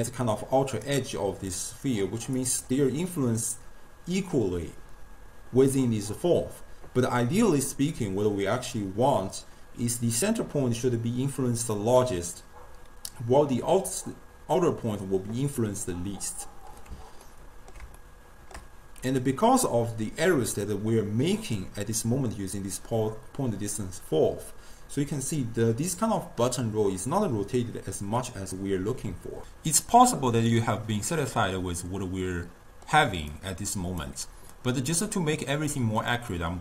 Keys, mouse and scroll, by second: 0.9-1.5 d, 1.6 click, 2.4 d, 2.5 d, 3.4 d, 17.3-21.1 ctrl+middle drag, 31.4-33.4 middle drag, 33.4-36.4 drag, 36.4-36.6 middle drag.